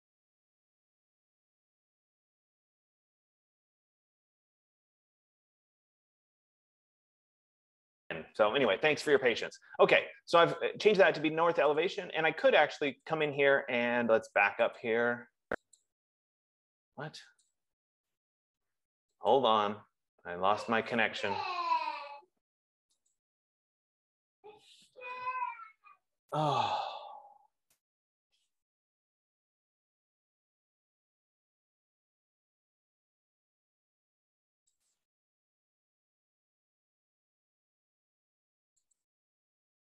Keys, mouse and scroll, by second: 12.4 Caps_Lock, 12.4-40.0 drag, 12.4 typing.